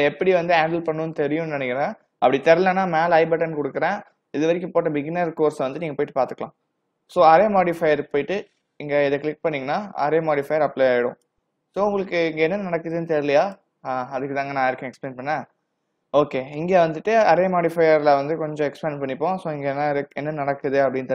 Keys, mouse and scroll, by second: 7.3 click, 11.3 click, 20.2 click.